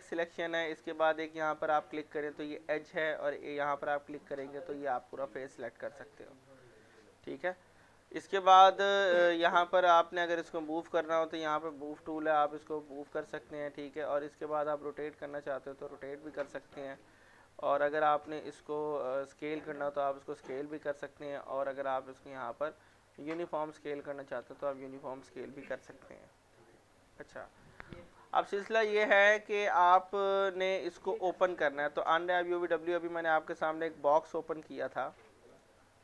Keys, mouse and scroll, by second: 5.3 middle click, 6.2 click, 7.2 middle click, 8.5-16.6 drag, 17.1 ctrl+z, 17.9 middle click, 19.2 click, 20.6 ctrl+z, 21.9-24.7 drag, 24.7 ctrl+z, 29.0-32.7 drag, 35.5 click.